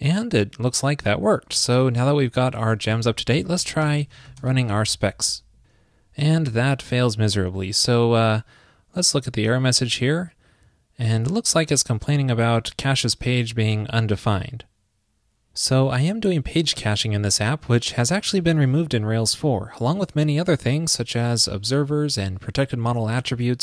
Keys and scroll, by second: 2.9 super+k.